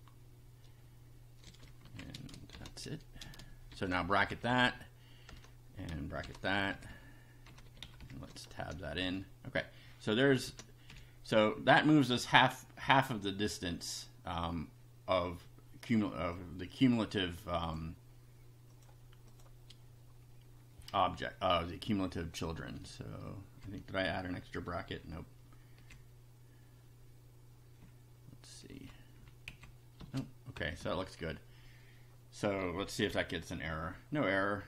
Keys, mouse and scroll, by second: 1.5-3.7 typing, 1.8 End, 4.3 shift+Down, 5.3 Return, 6.3 shift+], 6.5 shift+Up, 7.5 Home, 7.8 shift+Down, 8.5 shift+Tab, 9.1 shift+Up, 10.3 Down, 10.5 Tab, 10.9 Up, 16.3-17.9 drag, 18.7 click, 19.3 click, 21.4 Left, 22.5 space, 22.8 Left, 25.0 Left, 27.8 Left, 29.3 Right, 29.5 Left, 30.0 space, 30.6 Down, 33.1 F5.